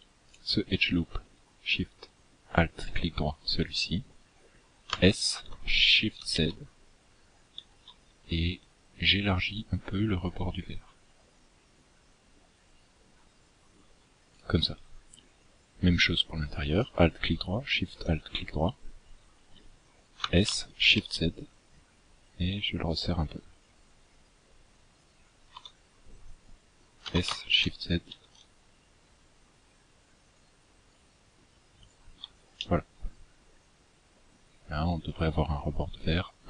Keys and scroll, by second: 4.2 s, 19.4 s, 26.2 s.